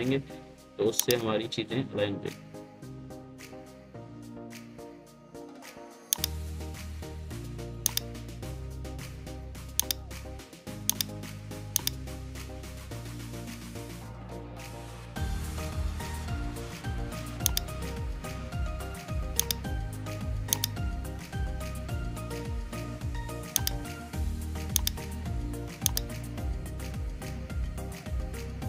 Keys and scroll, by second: 0.0 ctrl+c, 2.6 ctrl+v, 4.5 ctrl+z, 10.6 ctrl+c, 12.8 ctrl+v, 26.5 ctrl+c, 26.8 ctrl+v.